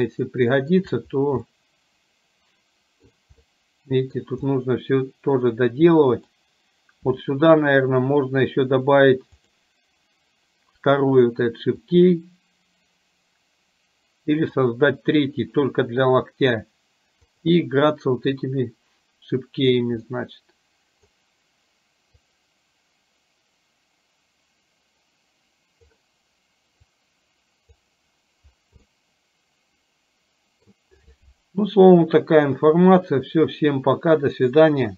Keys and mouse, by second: 1.4-3.2 middle drag, 3.4 middle click, 4.6-5.6 middle drag, 6.2 middle click, 9.6 click, 11.9-14.6 drag, 18.4-19.7 drag, 20.2-21.2 middle drag, 22.4 click, 26.9-27.9 drag, 29.1-30.7 middle drag.